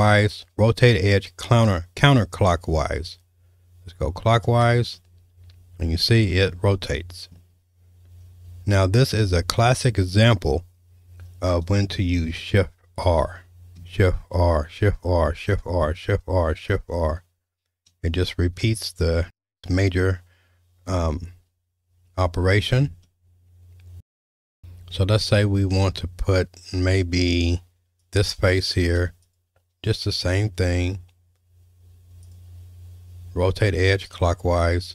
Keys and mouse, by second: 5.0 shift+middle click, 6.3-7.3 middle drag, 13.0 shift+r, 14.2 shift+r, 14.8 shift+r, 15.4 shift+r, 15.9 shift+r, 17.2 shift+r, 18.1 shift+r, 23.0-24.3 shift+middle drag, 28.0 click, 29.3 shift+click, 32.3-34.2 drag.